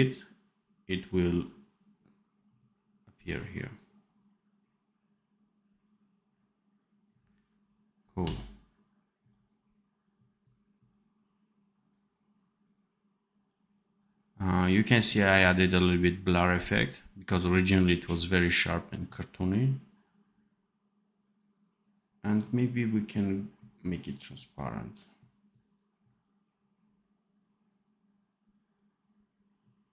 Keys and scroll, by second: 8.1 v.